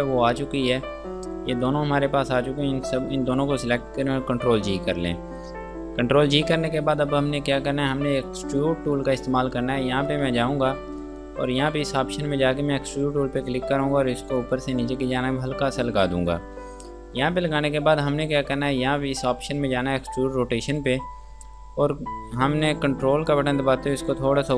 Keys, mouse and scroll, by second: 1.8 shift+click, 4.0 ctrl+g, 10.3 click, 20.9 click, 23.4 ctrl+Num_Lock, 23.5 click.